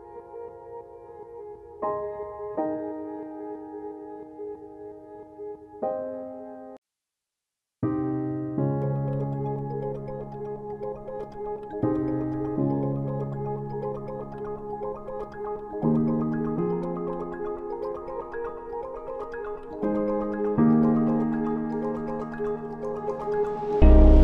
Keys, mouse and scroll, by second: 23.9 click.